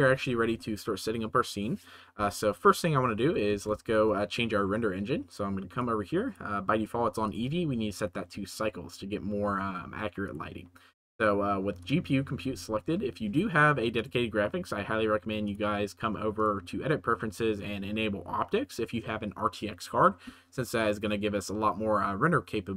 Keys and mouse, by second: 0.1 ctrl+s, 3.5 ctrl+s, 5.3 click, 5.7 click, 7.2-8.5 middle drag, 10.2-12.0 middle drag, 13.9-14.8 middle drag.